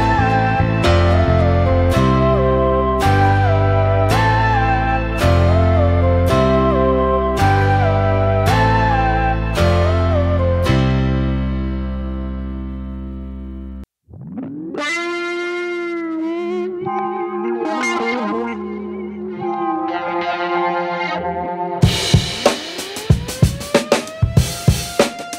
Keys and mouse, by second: 0.6 g, 1.6 r, 3.2 g, 3.7 right click, 3.9 g, 4.7 shift+middle click, 6.6 shift+middle click, 7.5 right click, 8.0 ctrl+r, 9.3 ctrl+r, 10.9 shift+middle click, 11.6 right click, 12.1 c, 19.5 shift+middle click, 20.3 g, 21.4 shift+middle click, 22.7 g, 25.0 right click, 25.1 g.